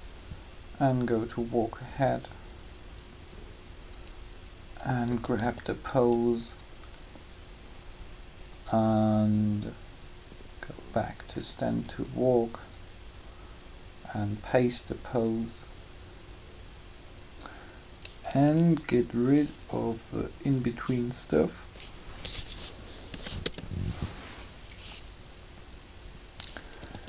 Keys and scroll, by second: 5.0-5.4 typing, 19.6 b, 23.0 Delete, 23.3 Return, 26.8 typing.